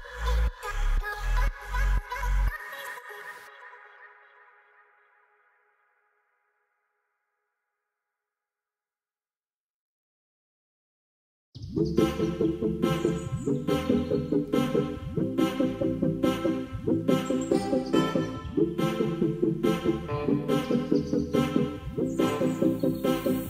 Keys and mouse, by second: 0.6-1.1 shift+middle drag, 1.6 click, 2.0 shift+middle click, 2.8 click, 4.2 click, 4.6 shift+middle drag, 6.1 click, 11.4 click, 14.2 ctrl+s, 16.1 click, 19.5 click, 21.6 click, 22.0 click.